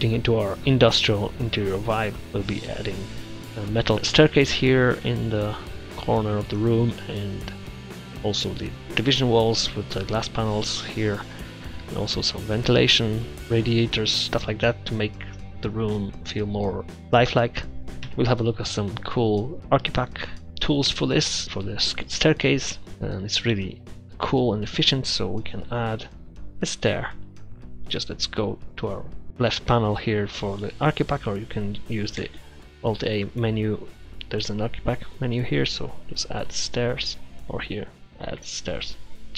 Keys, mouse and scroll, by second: 17.9 middle click, 18.1 KP_0, 22.8-23.9 middle drag, 25.1-26.8 middle drag, 25.1-25.4 scroll down 1, 32.3 shift+a.